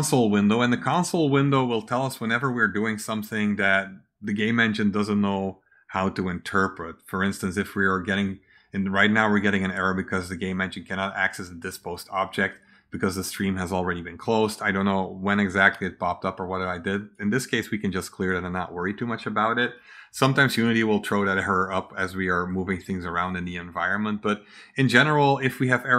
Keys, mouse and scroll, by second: 9.1 click, 16.8 click.